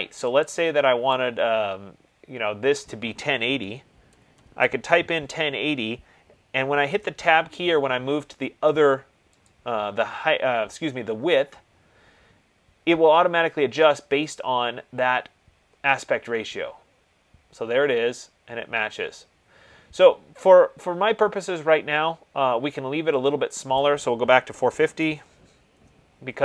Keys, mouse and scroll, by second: 0.8 click, 3.4 click, 3.8-4.7 typing, 7.0 Tab, 9.9 click, 14.0 click, 24.3-26.4 drag, 24.6-25.1 typing, 25.9 Tab.